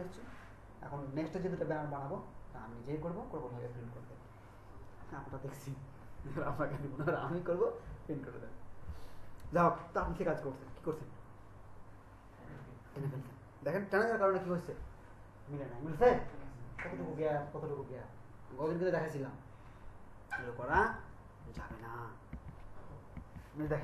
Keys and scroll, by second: 20.9 Right, 21.5 Right, 22.3 Right, 23.1 Right.